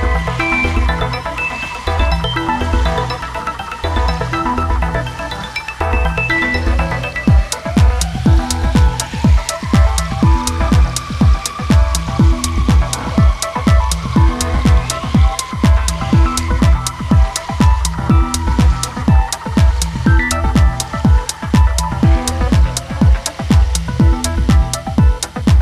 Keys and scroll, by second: 0.9 ctrl+z, 10.2 space, 15.5 space, 18.6 ctrl+z, 21.8 space.